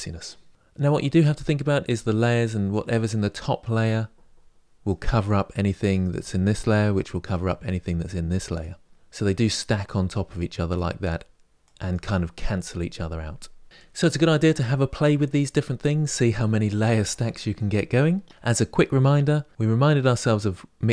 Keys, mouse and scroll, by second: 0.5 click, 5.4 click, 7.7 click, 10.4 click, 11.4 click, 13.6-19.5 drag.